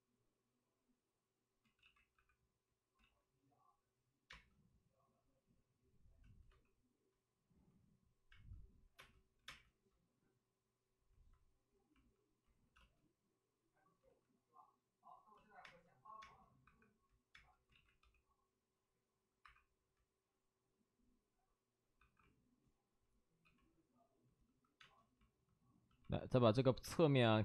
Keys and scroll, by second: 1.5 ctrl+z, 2.1 ctrl+z, 2.1 1, 2.9 ctrl+z, 4.2 space, 6.4 space, 6.4 3, 8.2 space, 8.9 space, 9.3 5, 12.4 ctrl+z, 12.7 space, 13.9 ctrl+z, 15.6 ctrl+z, 15.6-17.9 typing, 17.6 ctrl+z, 19.3 1, 23.1-24.7 typing, 26.8 space, 27.1 3.